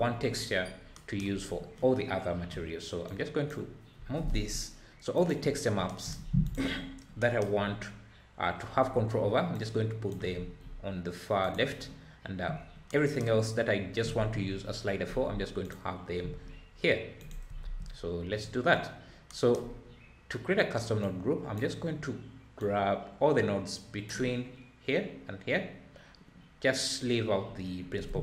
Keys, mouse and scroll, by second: 0.6-0.9 scroll up 4, 1.4-2.1 scroll down 3, 2.1-2.8 scroll down 1, 3.1 click, 4.3 g, 6.4 click, 9.5 drag, 10.3 g, 11.8-12.1 scroll down 1, 12.5-12.9 scroll down 5, 15.6 click, 17.2 click, 17.6 ctrl+s, 21.0 click, 22.6 drag.